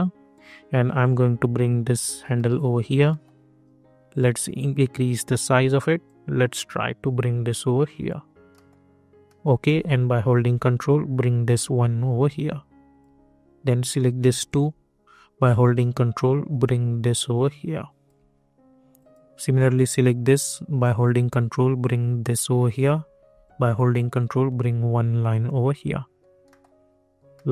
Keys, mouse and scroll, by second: 2.3 middle click, 3.6 scroll up 1, 4.5-8.5 drag, 8.5 middle click, 10.7-13.9 ctrl+drag, 15.8-18.9 ctrl+drag, 20.8-23.4 ctrl+drag, 23.4-26.4 ctrl+drag, 26.4 middle click.